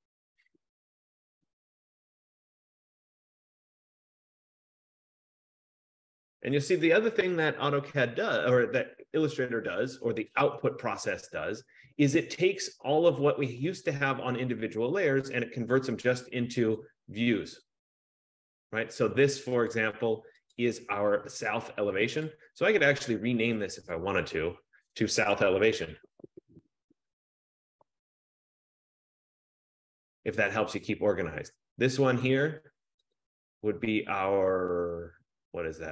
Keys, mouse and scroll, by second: 2.0 click, 3.1 click, 4.4 click, 6.2 click, 16.9 click, 17.7 click, 19.8 click, 20.7 click, 22.4 click, 23.1 click, 24.0 click, 24.4 click, 25.5-29.2 typing, 30.6 click, 32.4 click, 32.8 typing, 33.4 click.